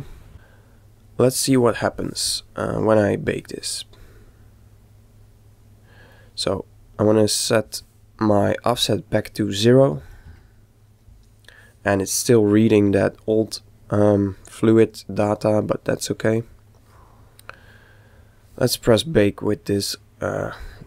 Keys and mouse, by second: 0.0 z, 2.9-4.7 middle drag, 6.7-8.6 right drag, 8.7 click.